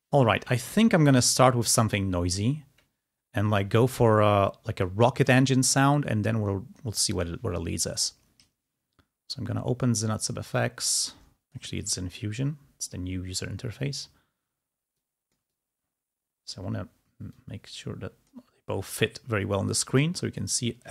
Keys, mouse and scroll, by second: 4.5-5.4 ctrl+scroll down 2, 5.4 click, 10.1-11.1 scroll down 4, 11.1-13.0 drag, 14.9-16.6 drag, 16.6-17.5 scroll up 2, 17.5 click.